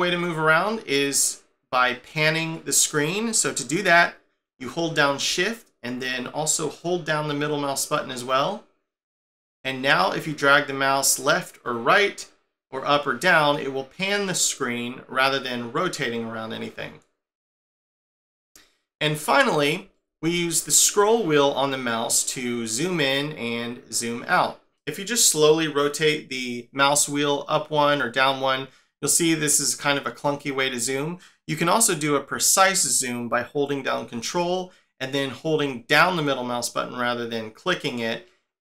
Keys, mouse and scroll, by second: 6.8 shift+middle click, 22.2-23.3 scroll up 8, 23.3-24.1 scroll down 10, 24.2 scroll up 5, 27.7-28.2 scroll up 1, 28.2-28.9 scroll down 1, 28.9-30.3 scroll up 5, 30.3 scroll down 2, 33.6 scroll down 1, 37.6 ctrl+middle click.